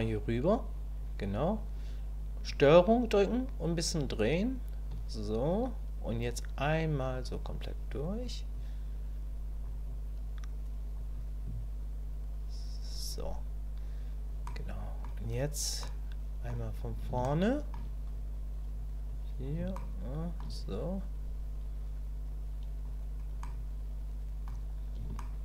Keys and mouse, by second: 3.3-4.8 ctrl+drag, 6.3-8.2 drag, 8.5-9.6 drag, 9.8-10.9 drag, 11.1-12.9 drag, 14.5 middle click, 15.8 middle click, 17.3 shift+middle click, 19.1 click, 19.7 shift+click, 20.6-22.8 drag, 23.4-24.4 drag, 25.2 shift+middle click.